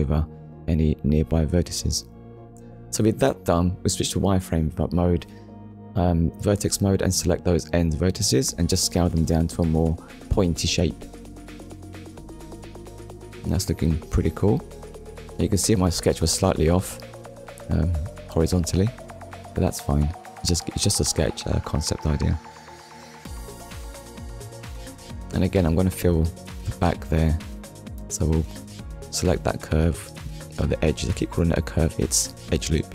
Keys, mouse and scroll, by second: 3.2 click, 4.4 Tab, 6.2 click, 6.7 middle click, 7.6 scroll down 1, 8.0 middle click, 10.2 scroll down 1, 11.2 middle click, 12.3 KP_1, 13.2 click, 14.1 middle click, 18.5 click, 20.5 middle click, 27.0 Tab, 28.4 click.